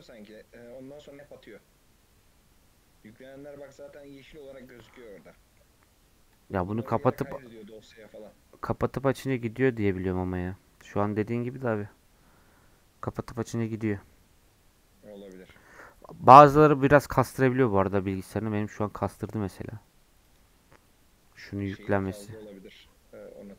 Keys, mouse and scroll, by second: 1.4-4.4 middle drag, 5.0 scroll down 1, 5.3-11.8 middle drag, 18.7-19.9 scroll down 1, 23.3 click.